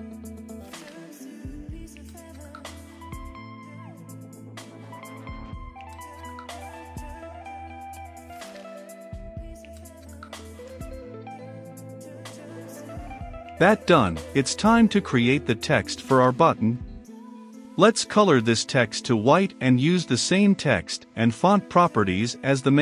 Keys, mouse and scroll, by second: 0.0-1.3 typing, 0.1 Return, 0.7 Return, 2.1 Return, 3.0 p, 3.1 a, 3.3 r, 3.6 n, 4.1 Return, 4.8 ctrl+s, 6.0-9.3 drag, 9.3-12.7 middle drag, 12.7 click, 13.3 Return, 14.6 shift+t, 14.7 e, 15.0 x, 15.5 shift+], 15.8 Return, 16.5 c, 16.7 o, 16.8 l, 16.8 o, 17.5 Return, 18.2 shift+`, 19.9 Return, 20.1 f, 20.6 Right, 21.0 Return, 21.8 t, 21.8 e, 21.9 x, 21.9 t, 22.2 Return.